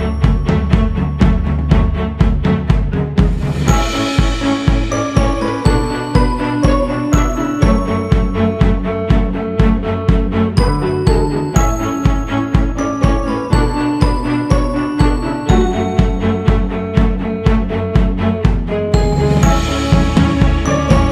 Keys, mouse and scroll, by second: 2.6-3.0 scroll down 4, 3.0 scroll up 4, 3.8 shift+s, 4.2 f, 5.6-6.0 scroll up 2, 6.1-8.2 drag, 8.2-8.9 scroll down 4, 8.9-9.4 scroll up 2, 9.4-10.0 scroll up 4, 10.0-11.3 drag, 11.3 scroll down 1, 11.7 x, 11.9 f, 14.7 click, 16.4-17.5 drag, 17.5-18.0 scroll down 3, 18.1 shift+s, 18.4 f, 19.4-21.1 drag.